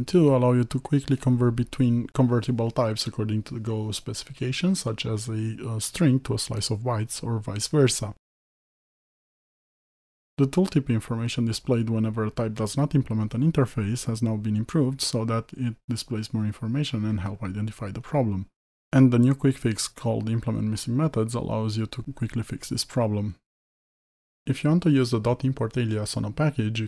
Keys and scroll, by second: 5.9 alt+Return, 19.4 alt+Return, 22.2 Return, 24.3 Escape, 26.3 alt+Return.